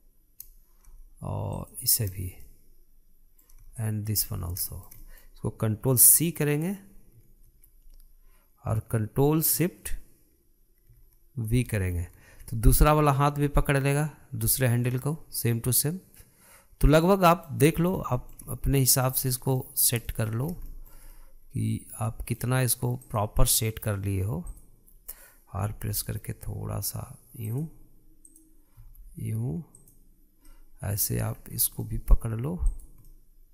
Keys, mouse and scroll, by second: 2.3 shift+click, 2.8-3.2 scroll down 2, 3.2-4.5 middle drag, 4.5-5.1 shift+drag, 5.1-5.4 scroll down 1, 5.4-7.9 shift+middle drag, 7.9 ctrl+c, 12.5 ctrl+shift+v, 14.7-17.7 middle drag, 18.4-18.9 scroll up 5, 18.9-20.0 shift+middle drag, 20.0-20.3 scroll up 3, 20.3-21.2 shift+middle drag, 21.2 scroll up 3, 21.4-23.7 shift+middle drag, 23.7 click, 24.2-25.2 middle drag, 25.2 drag, 26.4 r, 29.0 click, 29.5 r, 31.2-32.1 middle drag, 32.1-32.5 scroll down 5, 32.5-33.4 middle drag, 33.4 click.